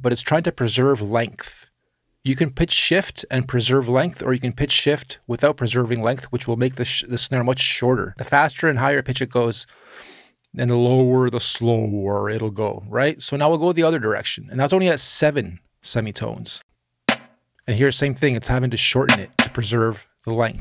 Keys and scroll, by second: 16.3 space.